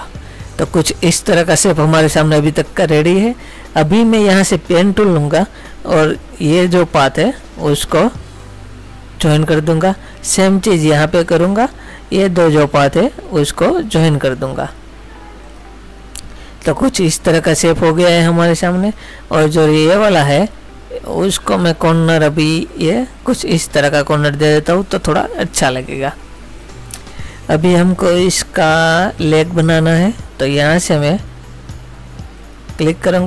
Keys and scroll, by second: 0.1 space.